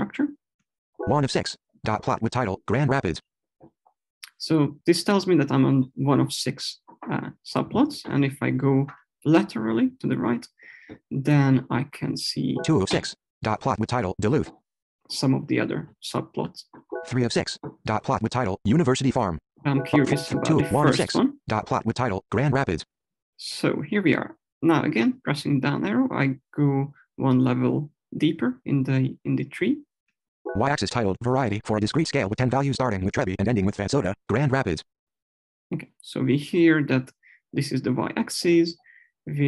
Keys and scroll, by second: 0.9 Left, 12.5 Right, 20.2 Left, 30.0 Down.